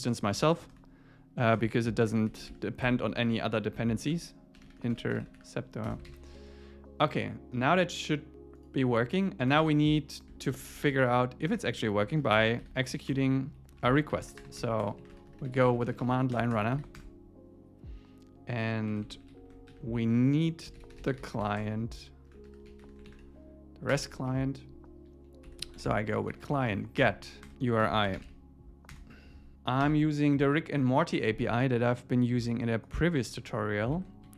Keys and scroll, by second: 2.8 Escape, 3.3 super+s, 4.0 alt+shift+Left, 5.9 Return, 6.1 super+s, 9.5 Return, 10.6 alt+l, 11.5 Return, 16.4 Return, 16.8 alt+8, 17.0 Return, 18.9 Up, 19.2 alt+Right, 19.7 Right, 23.9 Return, 24.3 Down, 27.0 Return, 29.8 super+v, 33.9 super+Right, 34.2 Left.